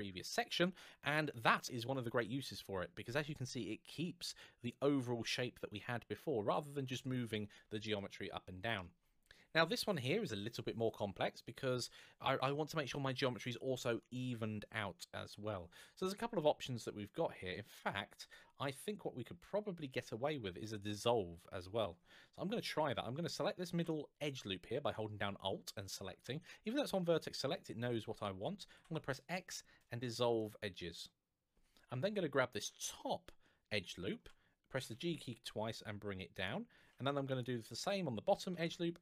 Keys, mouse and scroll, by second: 0.9 click, 7.7 shift+middle click, 16.1-17.0 scroll down 1, 17.0-18.5 scroll up 1, 23.1 alt+click, 28.5 x, 32.6 alt+click, 34.6 g, 36.1 click, 37.0 alt+click, 38.2 click, 38.3 alt+g.